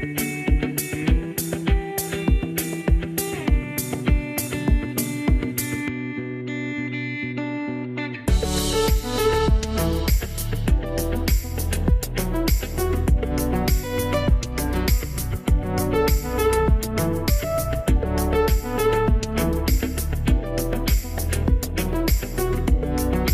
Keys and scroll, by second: 5.8 5, 5.9 Return.